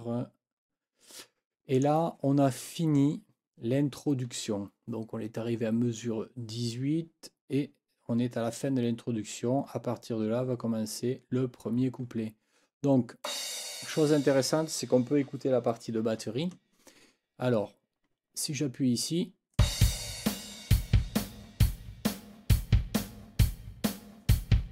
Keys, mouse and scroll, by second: 1.7 click, 13.2 click, 19.5 click.